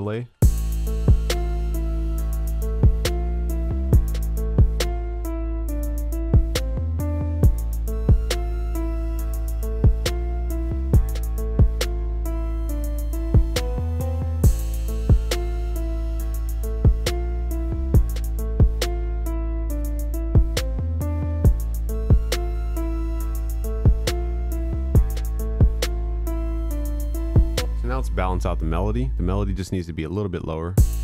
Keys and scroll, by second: 1.9 ctrl+s, 21.7 ctrl+s.